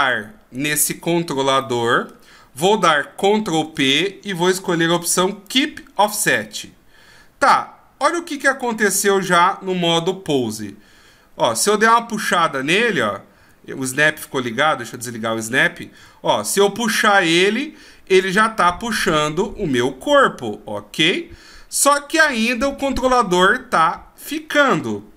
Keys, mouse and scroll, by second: 0.5 shift+right click, 1.6 middle click, 3.6 ctrl+p, 8.3 click, 9.3 click, 10.4 g, 15.0 click, 16.0 g.